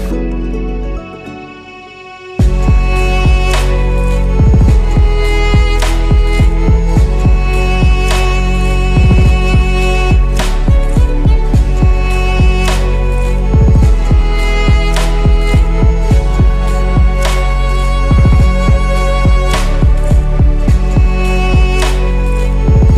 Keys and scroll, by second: 7.3 8, 9.4 Tab, 12.8 Delete, 16.7 z.